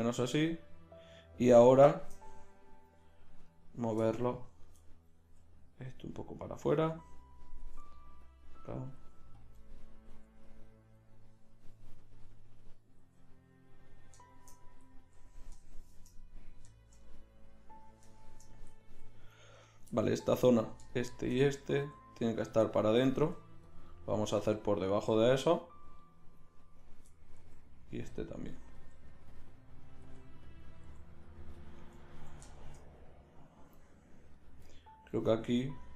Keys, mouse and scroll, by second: 3.5-5.1 drag, 5.3 g, 7.3-9.5 drag, 7.7 g, 9.0 g, 10.1 g, 13.1 g, 19.6-27.4 right drag, 21.8 g, 23.2 g, 24.4 g, 27.4 g, 28.7 g, 30.0 g, 30.9 g, 34.3 click, 34.7 right click, 34.8 right click, 35.1-35.9 middle drag.